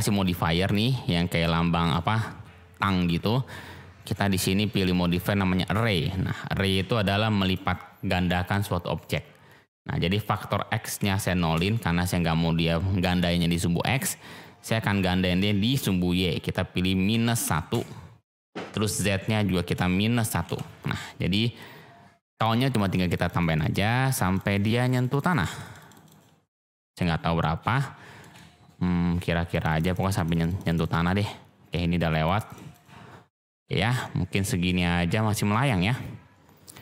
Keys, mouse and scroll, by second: 4.7-7.5 drag, 10.2-14.4 drag, 14.9-18.4 drag, 18.9-21.1 drag, 22.6 click, 22.8 click, 23.0 click, 23.1 click, 23.3 click, 23.4 click, 23.6 click, 23.7 click, 23.9 click, 24.0 click, 24.2 click, 24.3 click, 24.7 click, 24.8 click, 25.0 click, 25.1 click, 25.3 click, 25.5 click, 25.6 click, 25.8 click, 26.0 click, 27.0-27.6 shift+drag, 27.7-28.1 shift+drag, 28.3 click, 29.5 click, 29.7 click, 29.8 click, 30.0 click, 30.1 click, 30.3 click, 30.4 click, 30.6 click, 30.8 click, 31.0 click, 32.4 click, 32.7 click, 34.0-35.3 middle drag.